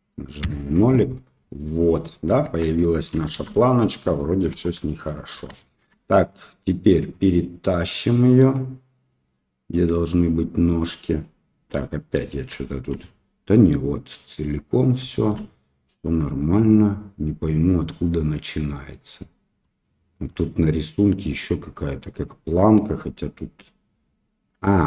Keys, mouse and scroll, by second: 1.4 middle click, 2.4 Tab, 2.7-3.0 middle drag, 3.3 shift+z, 3.5-4.1 middle drag, 4.5 KP_1, 5.5 shift+middle drag, 7.1-11.0 drag, 12.6 shift+middle drag, 15.1 shift+middle drag, 19.6 click.